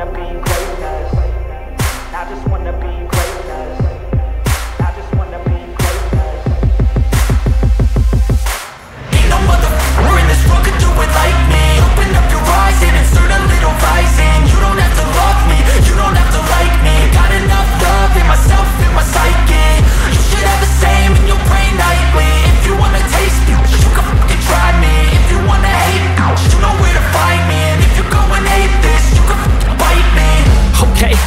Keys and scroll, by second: 19.3 ctrl+space, 20.5 ctrl+space, 25.1 ctrl+space, 25.7 [, 26.2 [, 26.3 [.